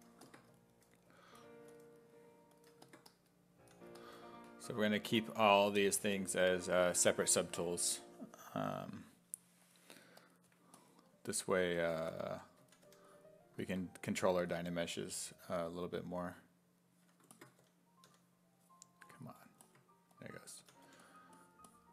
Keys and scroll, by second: 3.6 s, 12.1-13.3 typing, 17.6 d, 18.1 d, 20.6 s, 20.9 1.